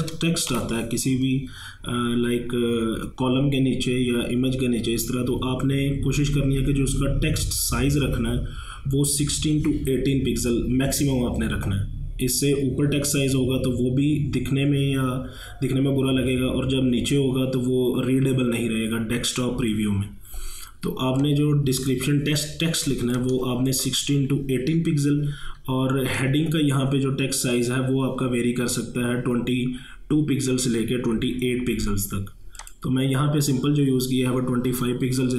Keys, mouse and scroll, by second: 0.6 v, 21.2 v, 21.2-23.2 drag, 23.2-26.2 drag, 32.6 click.